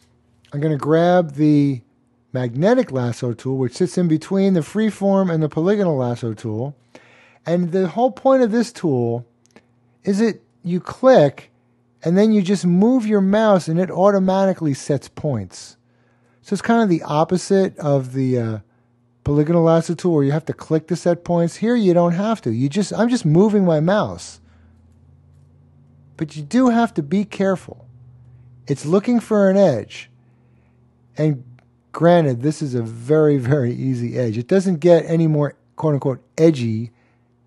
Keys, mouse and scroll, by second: 1.6 click, 10.8 click.